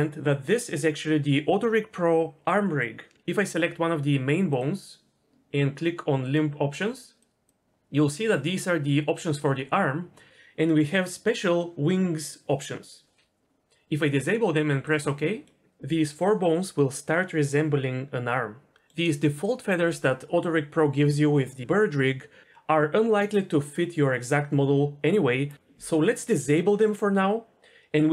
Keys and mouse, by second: 6.2-15.0 drag, 15.4 middle click, 18.7 middle click.